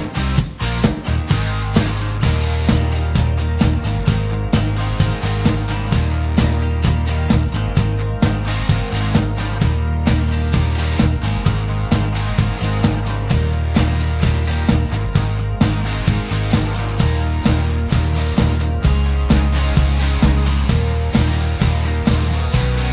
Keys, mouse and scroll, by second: 0.5 click, 2.2 scroll up 1, 3.1 click, 3.1 right click, 4.3 click, 5.1 KP_1, 5.5 KP_5, 6.7 click, 8.3 click, 11.6 click, 12.2 click, 14.3 click, 16.4 click, 16.7 KP_5, 17.7 click, 20.4 middle click, 20.6 click, 21.7 KP_1, 21.9 KP_5, 22.2 KP_0, 22.8 KP_Enter.